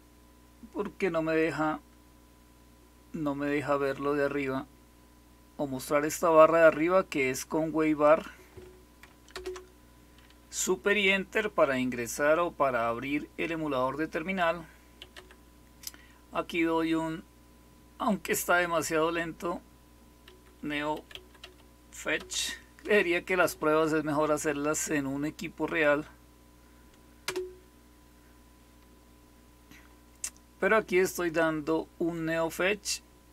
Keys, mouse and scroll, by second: 7.9 click, 8.3 click, 9.2 super+Return, 14.7-15.5 typing, 20.2-22.7 typing, 27.2 Return.